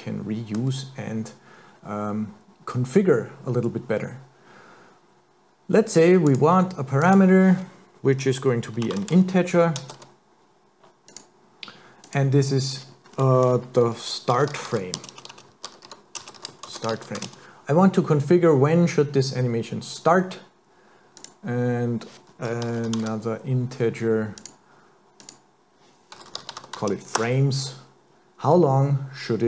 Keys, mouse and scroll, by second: 6.3 click, 12.0 click, 15.2 BackSpace, 15.3 BackSpace, 21.2 click, 25.2 click.